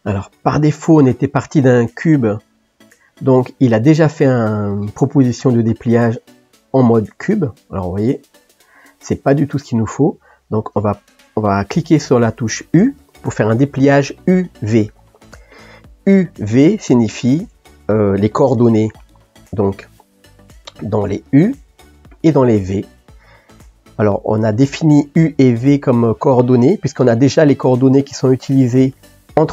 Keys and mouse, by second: 19.5-29.5 middle drag.